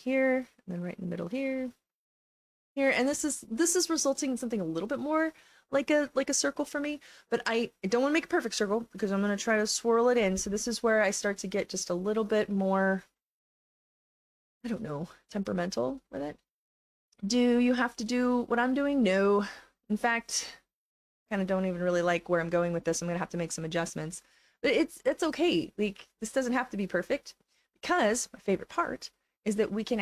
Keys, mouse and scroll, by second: 0.3 click, 1.5 click, 2.7 click, 11.9 click, 15.6 click, 17.8 click, 18.9 click, 22.0 click, 22.9 click, 24.4 click, 25.4 click, 26.3 click, 26.9 click, 27.5 click, 28.8 click, 29.6-30.0 drag.